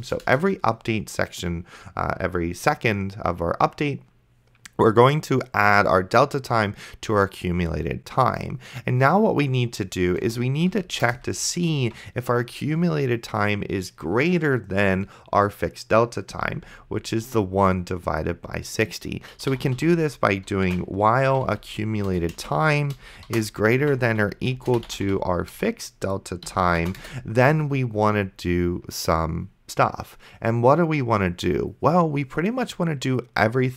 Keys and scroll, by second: 0.3 Return, 10.5 Return, 10.7 Up, 11.0 Return, 11.3 Tab, 19.2-22.4 typing, 22.1 Return, 23.6-25.6 typing, 26.5 End, 27.0 Return.